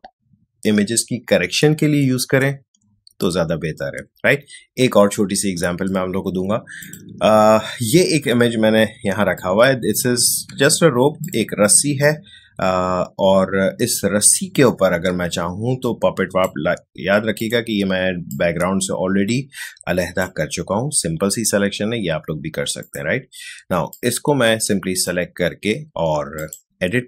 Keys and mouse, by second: 6.8 click, 8.9 space, 9.3-27.0 ctrl+drag.